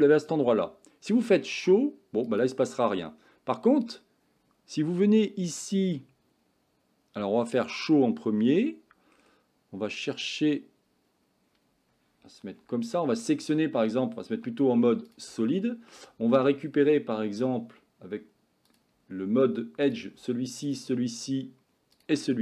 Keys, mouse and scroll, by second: 1.3 click, 2.3 click, 7.6 click, 12.7 Tab, 13.0 middle click, 14.4 z, 15.5 shift+middle click, 19.9 click, 20.7 shift+click, 22.0 shift+click.